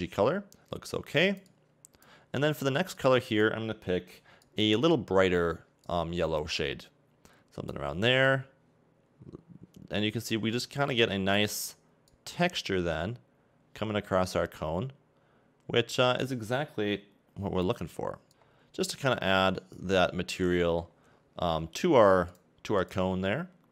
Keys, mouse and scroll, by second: 3.0 click, 5.9 click, 18.5 scroll down 5, 18.8 middle click, 20.9-22.4 scroll up 3, 22.4 click.